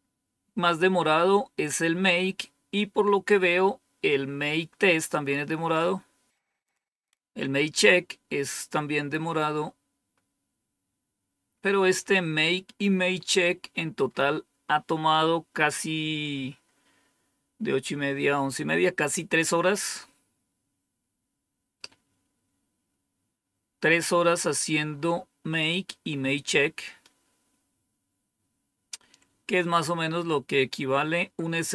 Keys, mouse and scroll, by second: 6.6-10.0 scroll up 2, 10.0-10.8 scroll up 1, 10.8-12.8 scroll up 1, 12.8-15.4 scroll up 3.